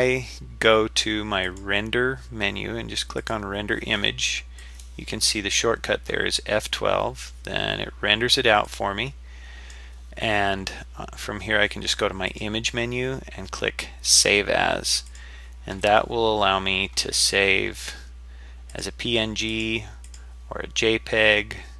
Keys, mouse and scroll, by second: 1.5-3.8 drag, 5.1 click.